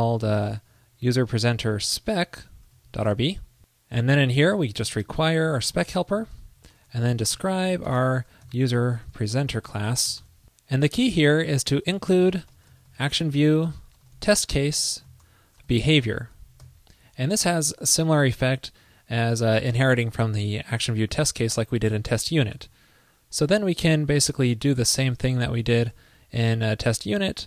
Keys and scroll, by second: 6.8 super+Return, 23.9 super+v, 25.6 alt+Right, 25.7 alt+shift+Left.